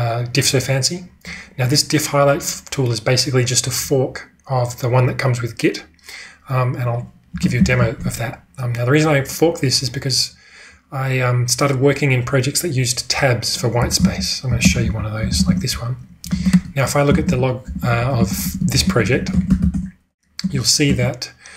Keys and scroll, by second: 7.5 ctrl+space, 9.6 c, 13.5-18.3 typing, 15.3 ctrl+e, 15.5 Return.